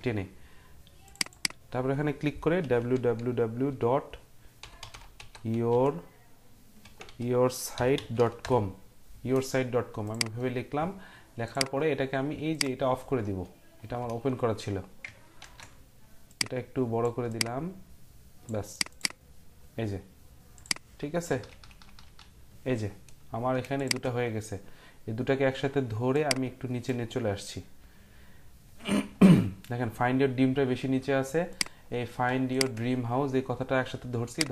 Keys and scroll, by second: 2.4-8.9 typing, 15.4 ctrl+t, 21.3 Down, 21.5 Down, 21.7 Down, 21.9 Down, 22.1 Down.